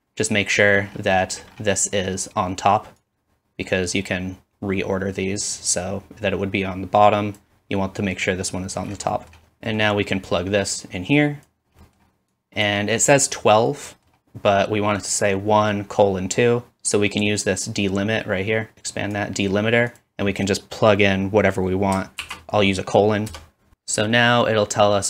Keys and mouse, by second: 23.7-25.0 middle drag.